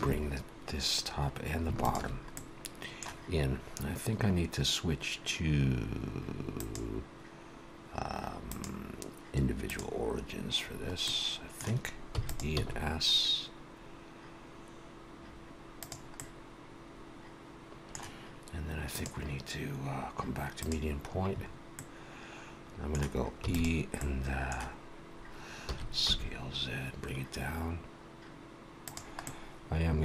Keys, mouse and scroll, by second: 1.9 alt+shift+click, 2.3 middle click, 6.6 click, 8.4 click, 10.9 middle click, 12.1 e, 12.5 s, 16.1 middle click, 18.9 click, 21.7 middle click, 23.4 e, 23.9 middle click, 25.6 s, 29.1 middle click.